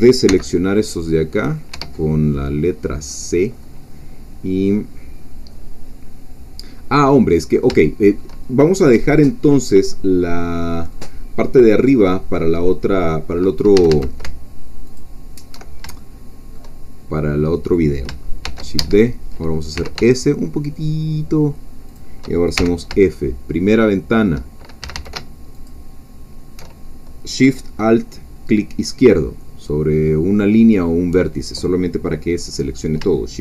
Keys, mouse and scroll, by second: 0.3 c, 0.5 click, 0.9 middle click, 1.7 Escape, 3.0-7.7 drag, 7.7-8.8 shift+middle drag, 8.9-9.3 scroll down 2, 9.3-11.1 middle drag, 11.5-12.7 middle drag, 12.7-13.7 scroll up 2, 13.7 a, 14.3 alt+shift+a, 14.9 alt+shift+click, 16.0 alt+shift+middle click, 16.8-18.1 shift+scroll up 2, 18.4 shift+d, 18.8 Escape, 19.7 s, 21.9 shift+click, 22.6 shift+f, 23.1-24.8 shift+middle drag, 23.1 shift+scroll down 1, 24.8 shift+a, 25.7 alt+shift+click.